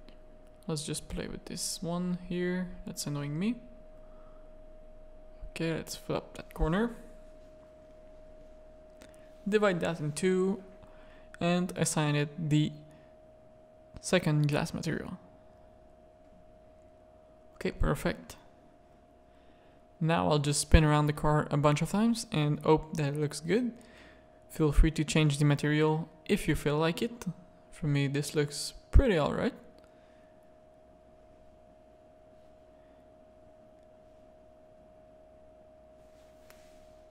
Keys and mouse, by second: 0.7 z, 1.2 click, 1.5 z, 2.4 Tab, 2.5 click, 2.9 Tab, 2.9 z, 3.2 a, 3.4 click, 3.9 z, 4.7 click, 6.4 click, 6.5 Tab, 7.4 Tab, 7.8 z, 8.0 a, 8.6 ctrl+r, 9.5 3, 10.2 alt+click, 13.7 click, 14.0 Tab, 14.2 z, 14.9 alt+a, 15.4-16.6 middle drag, 17.0 middle click, 17.2 z, 20.4-25.7 middle drag, 26.4-32.3 middle drag, 32.8 middle click, 34.5 middle click, 35.1-36.7 middle drag.